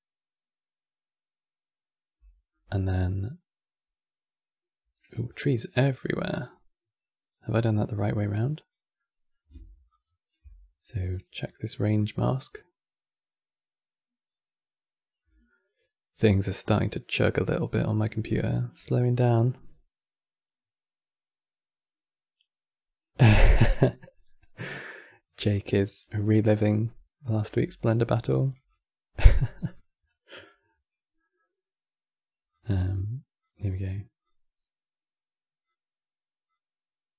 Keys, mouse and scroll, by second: 4.9 scroll down 3, 5.7 middle click, 6.1 scroll up 4, 8.0 click, 8.7-11.9 middle drag, 11.9 ctrl+shift+click, 26.5-28.0 middle drag, 28.0 click, 28.8 g, 29.7-32.2 middle drag, 32.2 click, 33.9-37.1 drag.